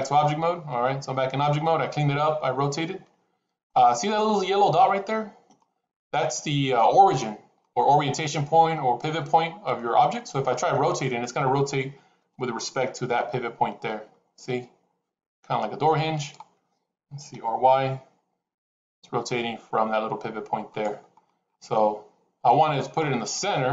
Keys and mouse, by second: 0.0 Tab, 2.1-3.6 middle drag, 9.7 middle click, 12.1 r, 21.6 middle click.